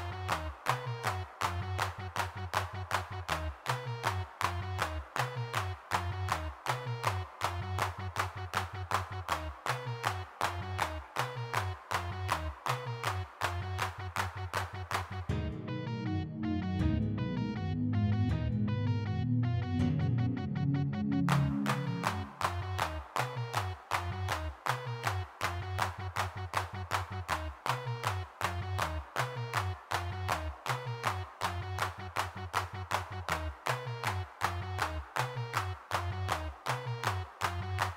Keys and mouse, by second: 1.6 middle click, 2.5-4.4 middle drag, 4.5 shift+c, 6.0 middle click, 8.1 3, 8.2 f, 8.8 click, 9.5-11.4 middle drag, 11.4 x, 11.7 f, 11.9 click, 12.3 middle click, 12.6 f, 13.0 click, 13.5 middle click, 14.7 middle click, 16.3 f, 16.6 click, 17.3 f, 17.6 g, 21.4 f, 22.3 click, 25.3-26.7 drag, 26.0 middle click, 26.5 middle click, 26.7 middle click, 27.7 middle click, 28.2 click, 28.2 f, 29.2 middle click, 30.0 3, 30.1 f, 31.4 f, 33.3 shift+c, 34.3 middle click, 35.1 middle click, 35.6 ctrl+z, 35.7 3, 37.0-37.9 middle drag.